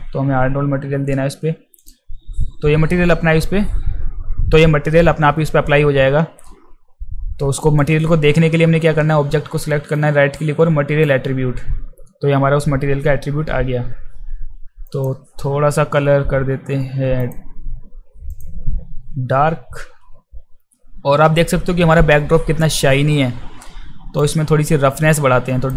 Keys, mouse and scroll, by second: 1.8 click, 7.8-11.0 right drag, 14.9 click, 17.2 click, 18.3 click, 24.2-25.7 drag.